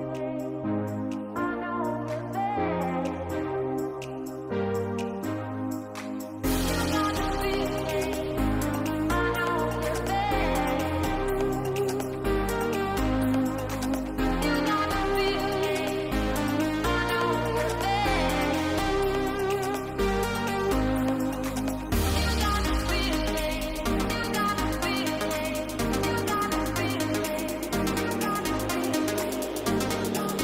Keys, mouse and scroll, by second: 0.7 click, 1.3 middle click, 2.3 shift+middle click, 2.8 s, 4.0-5.3 drag, 5.7 s, 7.6 click, 8.9 g, 11.3 alt+d, 16.0 g, 18.6 shift+click, 19.8 alt+d, 21.8 shift+middle click, 22.3-22.9 middle drag, 23.7 KP_0, 27.0-28.2 drag, 29.4-30.4 drag.